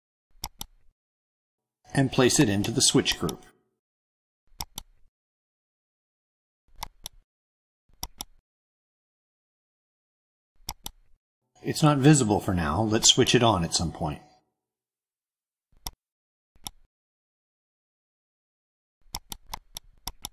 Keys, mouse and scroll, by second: 0.4 click, 2.4 click, 3.0 right click, 4.4 click, 6.7 click, 7.9 right click, 10.5 click, 13.0 click, 13.6-14.1 drag, 14.7 click, 15.8-17.2 drag, 19.0 click, 19.4 click, 20.0 click, 20.2 BackSpace.